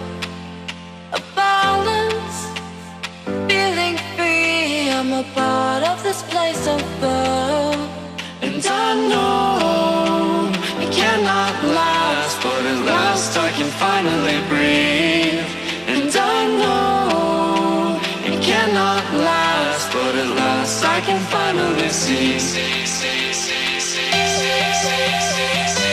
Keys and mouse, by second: 0.3 click, 0.5 space, 0.7 click, 1.1 Up, 2.0 click, 2.5 Up, 3.3-5.3 typing, 3.5 click, 3.9 click, 4.4 ctrl+=, 4.9 click, 5.1 click, 5.8 click, 6.1 Up, 6.9 click, 7.2 space, 7.3 click, 7.9 Up, 8.4-11.2 typing, 8.6 click, 9.1 click, 9.5 click, 9.8 click, 10.1 click, 10.6 click, 10.7 Up, 11.3 click, 11.8 Up, 12.5 click, 12.7 Left, 13.1 ctrl+0, 13.9 space, 14.1 click, 14.3 space, 15.1 click, 15.6 space, 15.7 click, 15.9 space, 17.6 click, 18.1 ctrl+=, 18.4 space, 18.5 click, 18.7 space, 22.3-25.5 drag, 25.5 ctrl+z.